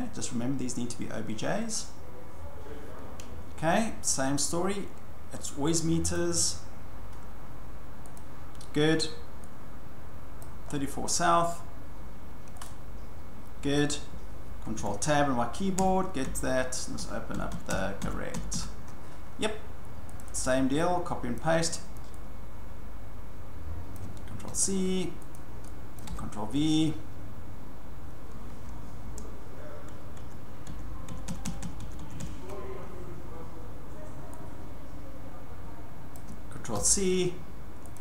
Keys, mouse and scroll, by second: 1.1-4.7 drag, 6.1 click, 8.1 click, 10.4 click, 10.7-11.1 scroll, 11.5 scroll, 12.6 click, 14.7 alt+Tab, 15.8 alt+Tab, 16.2 alt+Tab, 17.0 alt+Tab, 17.3 alt+Tab, 17.5 alt+Tab, 17.7 alt+Tab, 18.0 alt+Tab, 18.3 alt+Tab, 18.5 alt+Tab, 20.2 click, 20.3 click, 21.4 click, 21.7 click, 23.9 click, 24.5 ctrl+c, 25.3 click, 26.0 click, 26.1 ctrl+v, 29.0 alt+Caps_Lock, 30.2 alt+Tab, 30.7 alt+Tab, 31.1 alt+Tab, 31.3 alt+Tab, 31.4 alt+Tab, 31.6 alt+Tab, 31.8 alt+Tab, 32.0 alt+Tab, 32.2 alt+Tab, 36.1 click, 36.7 ctrl+c, 37.9 click.